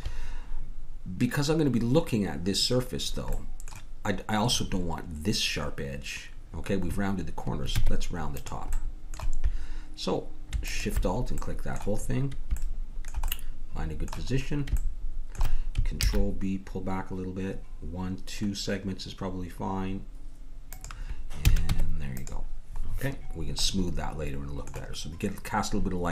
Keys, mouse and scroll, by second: 7.7 Tab, 10.6-12.8 drag, 14.1-15.2 middle drag, 16.0 ctrl+b, 16.8-17.7 scroll up 1, 17.7-19.1 scroll up 1, 19.1-19.6 scroll up 1, 21.4 a, 21.6 Tab, 22.9-24.3 middle drag.